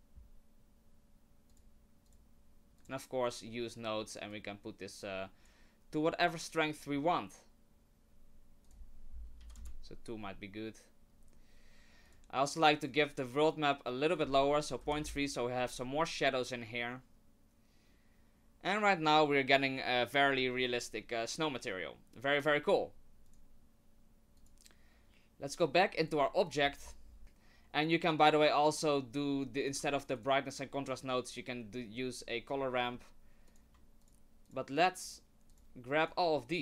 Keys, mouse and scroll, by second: 1.5 click, 2.8 click, 4.3 click, 6.8-7.3 scroll up 4, 8.6 click, 12.1 click, 14.1 click, 23.2 click, 26.0 right click, 26.7-27.2 scroll down 11, 29.6 click, 30.2 shift+click, 31.8 middle click, 32.5 scroll down 1, 32.8 middle click, 32.9 middle click, 33.5 click, 34.0 shift+click, 34.4 shift+click, 35.0 shift+click, 35.5 shift+click, 36.0 click.